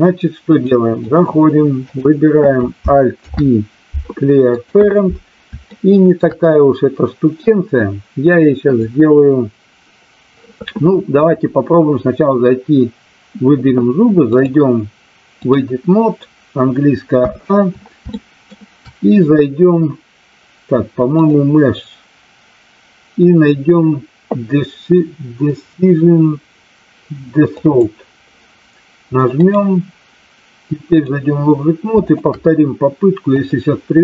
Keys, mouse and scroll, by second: 0.5-1.1 drag, 1.8 click, 3.0 alt+p, 5.7-6.3 shift+middle drag, 14.3-15.5 drag, 17.1 a, 18.1 shift+middle click, 21.1-27.8 drag, 29.5-31.0 drag, 32.0 shift+click, 33.3-34.0 drag.